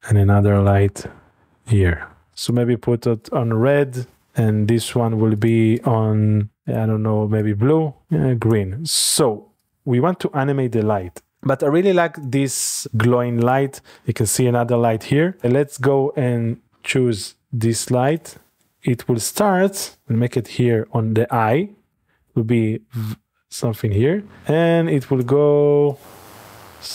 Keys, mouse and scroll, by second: 0.7 shift+d, 2.3-5.0 drag, 5.4-8.8 drag, 9.6 click, 11.3 click, 12.2 click, 13.4 click, 15.3 click, 15.8-16.9 shift+middle drag, 16.4-18.1 scroll up 1, 18.1 click, 21.9 i, 23.6 click, 24.4-26.9 drag.